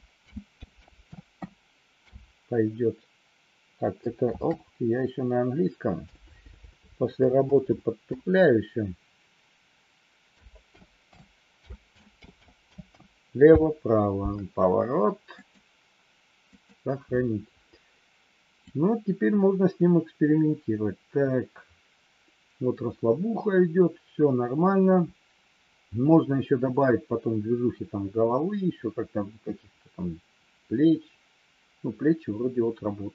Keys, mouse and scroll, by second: 18.6-33.1 drag.